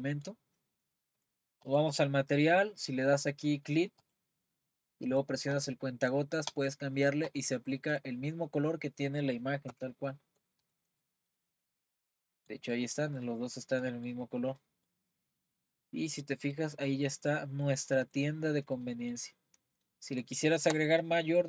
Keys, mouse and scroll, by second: 0.5 scroll up 2, 1.7-6.5 drag, 8.0 click, 9.7 Tab, 10.1-10.6 middle drag, 10.6 click, 11.0-14.2 middle drag, 14.2-14.7 scroll down 5, 14.7-18.0 middle drag, 18.0 click, 18.4-18.7 scroll down 2, 18.7-19.6 middle drag, 19.6-20.3 scroll up 1, 20.3-21.4 shift+middle drag.